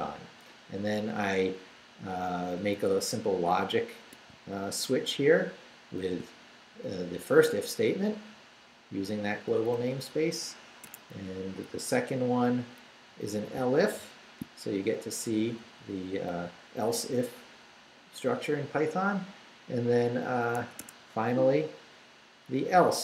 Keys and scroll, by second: 1.3 Down, 2.6 Right, 6.0 shift+v, 8.3 Down, 9.3 Up, 10.1 Down, 10.8 Escape, 11.1 Down, 13.1 Down, 13.9 shift+v, 15.3 Right, 16.3 Left, 20.6 Escape, 21.2 Down, 22.6 Down.